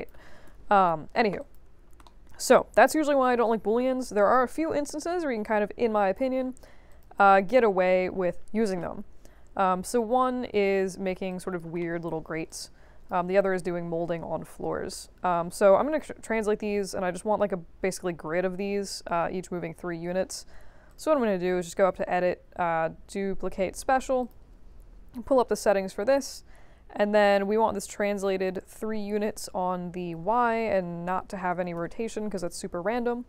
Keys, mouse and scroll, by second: 1.3 click, 2.0 alt+middle click, 2.3 alt+middle click, 2.5 alt+click, 4.0 ctrl+d, 4.3 w, 5.1-6.1 drag, 6.8 click, 7.4 3, 8.9 q, 11.2 alt+click, 11.8 alt+middle click, 12.1-12.4 alt+middle drag, 12.4 alt+click, 20.8 click, 24.2 click, 28.2 click, 28.9 3, 30.2 Tab, 30.5 Tab, 30.7 Tab, 31.0 Tab, 31.7 0, 32.3 Tab.